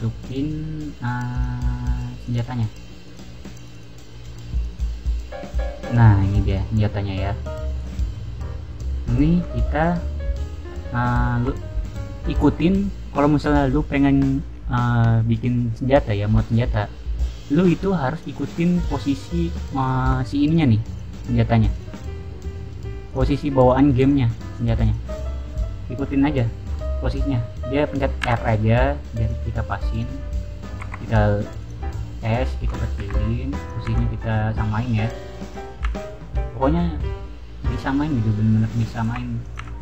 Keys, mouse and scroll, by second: 1.2 click, 2.1 click, 2.3 click, 3.0 click, 3.5 click, 4.5 click, 4.6 click, 5.3 scroll up 1, 5.7-6.2 middle drag, 6.4 click, 6.7 middle drag, 7.7 click, 8.1-8.6 scroll down 4, 12.1-12.7 middle drag, 18.1 click, 18.5 middle click, 18.5 scroll up 1, 19.0-19.5 middle drag, 20.5 click, 20.8 click, 21.1-21.4 middle drag, 21.7 click, 22.1-22.5 middle drag, 23.0 click, 23.6 click, 23.9 click, 24.7 click, 28.1 r, 29.1 click, 29.9 click, 30.7 s, 31.5 click, 31.7 middle click, 32.9 r, 33.5 click, 33.8 g, 34.8 click, 35.0 r, 35.4 click, 35.7 g, 38.7 click, 39.0-39.8 typing, 39.3 click.